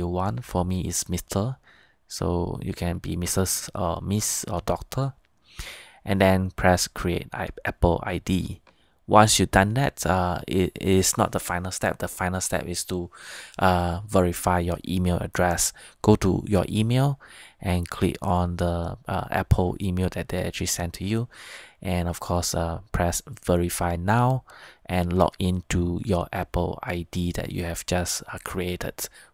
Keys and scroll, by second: 14.4 super+Tab.